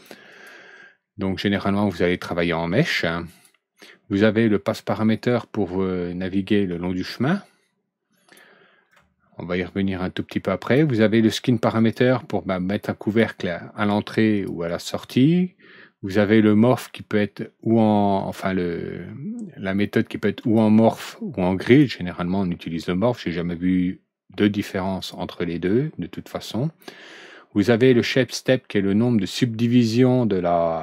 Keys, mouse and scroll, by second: 0.3 click, 3.2 click, 5.1-8.3 drag, 10.1-10.7 drag, 11.7 click, 12.9 click, 14.3 click, 14.6 click, 20.3 click, 21.6 click, 24.9 click, 25.6 click, 28.7 middle click.